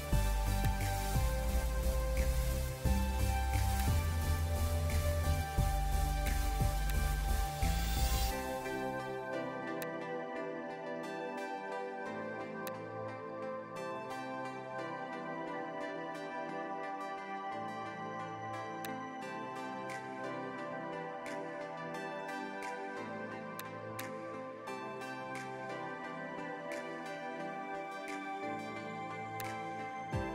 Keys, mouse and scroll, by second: 4.7 Return, 8.2 v, 12.6 shift+click, 16.8 Return, 20.8 ctrl+o, 22.6-23.9 scroll down 1, 26.9-27.7 scroll down 1, 28.8 v.